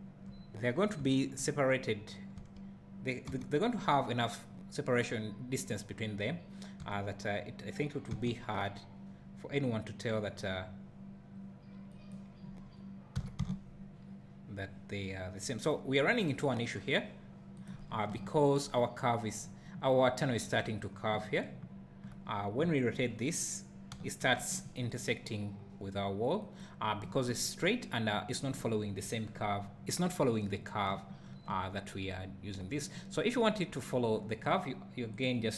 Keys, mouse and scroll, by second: 0.7-1.0 scroll up 1, 1.2 `, 2.4 s, 6.8 r, 13.2 r, 17.6 right click, 17.8 scroll down 1, 18.1 `, 19.4 scroll down 1, 21.5 `, 22.2 scroll up 1, 22.6 `, 23.1 scroll up 1, 23.9 r, 26.7 right click, 30.9 `.